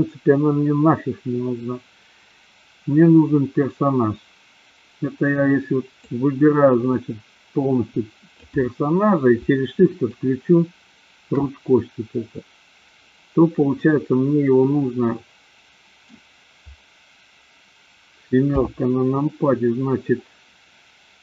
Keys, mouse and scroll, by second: 5.9-8.7 drag, 9.9 shift+click, 13.7-16.1 middle drag, 18.4 KP_7.